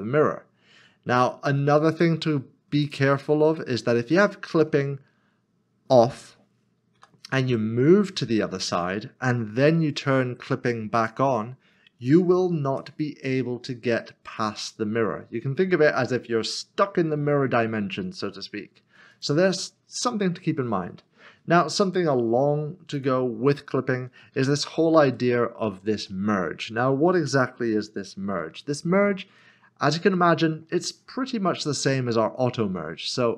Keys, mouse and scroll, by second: 2.8 g, 2.8 click, 7.0 g, 8.6 click, 10.9 click, 12.7 l, 14.0 g, 19.1 g, 19.1 click, 22.9 click, 28.7 ctrl+z, 28.9 scroll up 1, 29.4 middle click, 30.1 shift+middle click.